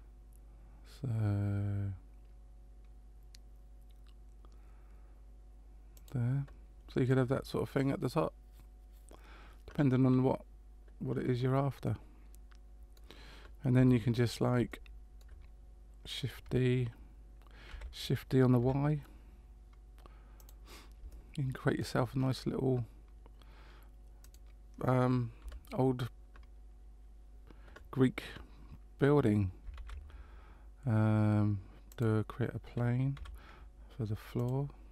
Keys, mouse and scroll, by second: 7.1 middle click, 11.8 middle click, 13.7 Tab, 14.7 shift+middle click, 17.7 shift+d, 21.1 shift+middle click, 22.1-24.1 scroll down 3, 24.2 right click, 25.4 Delete, 29.7 shift+a, 33.2 s.